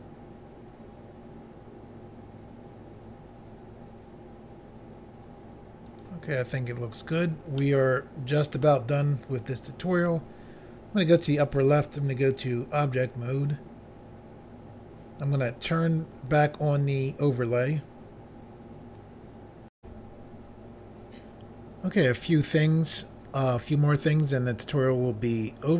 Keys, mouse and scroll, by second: 5.9 right click, 7.6 middle click, 11.2 click, 11.3 click, 12.3 click, 12.5 click, 16.3 click, 16.4 click, 19.8 Pause.